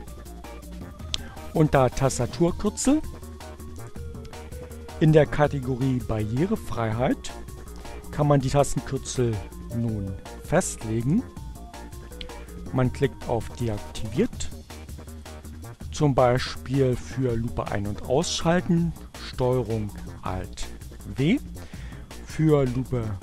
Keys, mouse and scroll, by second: 1.5-3.6 drag, 8.9 click, 9.9-11.0 drag, 13.7 click, 14.1-15.1 drag, 19.0 ctrl+alt+w, 22.5 click.